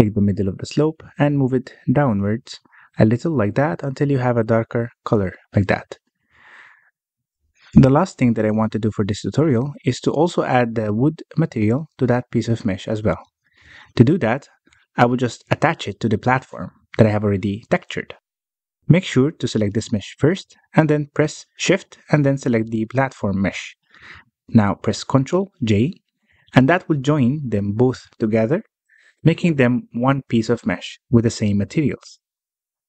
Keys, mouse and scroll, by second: 1.1-6.3 drag, 6.3 scroll down 1, 6.6 alt+a, 6.9-7.6 middle drag, 7.6 scroll down 1, 7.8-8.6 middle drag, 8.6-8.9 scroll up 1, 8.9-10.5 middle drag, 10.5-10.9 scroll up 1, 10.9 click, 11.6-11.9 scroll up 1, 11.9-12.6 middle drag, 12.6 g, 15.4 alt+a, 15.7-16.2 drag, 17.0 click, 17.5 click, 18.6-19.3 scroll up 1, 19.3-20.9 middle drag, 20.9 click, 21.6-22.9 middle drag, 22.9 shift+click, 24.7 alt+a, 25.0 click, 25.4 shift+click, 26.3 ctrl+j, 28.1 g.